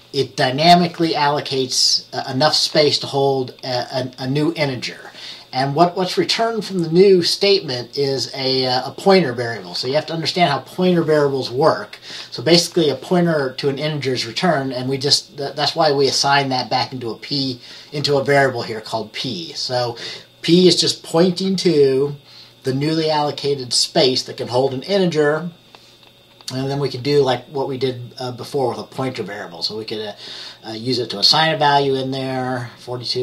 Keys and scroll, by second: 29.1 F10, 31.3 F10.